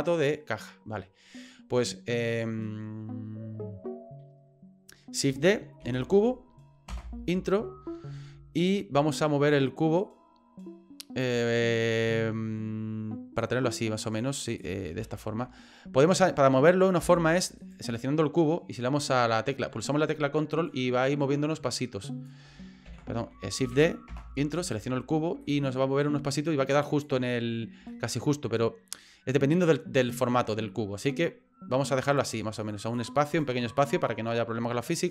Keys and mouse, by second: 5.8 shift+d, 8.7-11.2 ctrl+drag, 12.1 shift+middle click, 13.4-14.6 drag, 15.0 ctrl+z, 15.0 ctrl+x, 17.0 Delete, 17.6 right click, 20.7-22.3 ctrl+drag, 22.9 ctrl+z, 23.6 shift+d, 24.6 right click, 25.4-27.0 ctrl+drag, 27.9 shift+middle click, 31.0-32.9 drag, 33.3 right click.